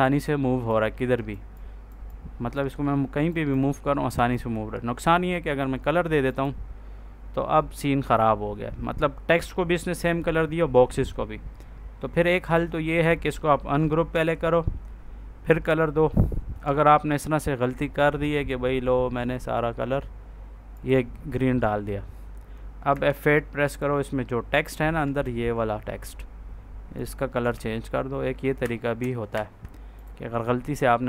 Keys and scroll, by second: 14.0 ctrl+z, 22.8 F8, 25.1 ctrl+a, 27.4 ctrl+s, 28.5 Escape.